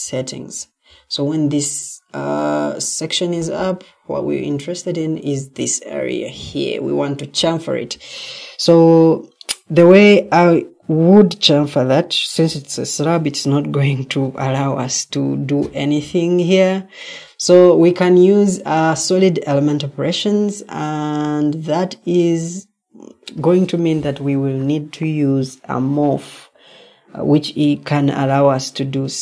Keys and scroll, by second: 18.0 Escape, 18.6 Escape, 21.1 Escape, 25.3 Escape.